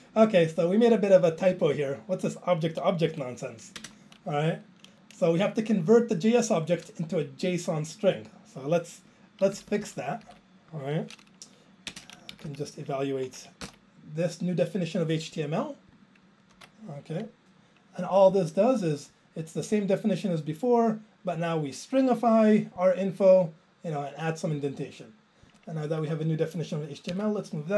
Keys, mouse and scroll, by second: 1.6 click, 3.0 Up, 3.8 alt+space, 9.6 ctrl+k, 9.7 ctrl+k, 9.8 ctrl+k, 10.3 ctrl+k, 11.9 ctrl+space, 12.3 Down, 12.5 Down, 14.1 ctrl+j, 19.8 click, 21.3 click, 22.8 click, 24.6 click, 24.7 click, 25.5 click, 25.5 click, 25.9 ctrl+a, 27.1 alt+Up.